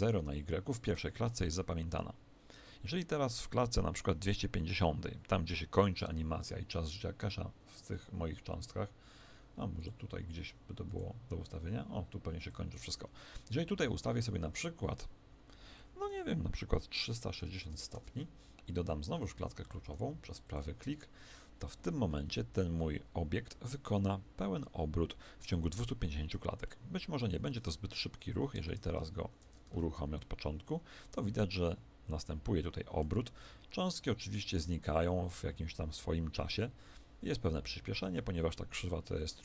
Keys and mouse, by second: 4.8 click, 26.6-28.5 middle drag, 27.4 alt+a, 28.5 Escape, 29.3 shift+Left, 29.7 alt+a, 31.5-39.4 middle drag.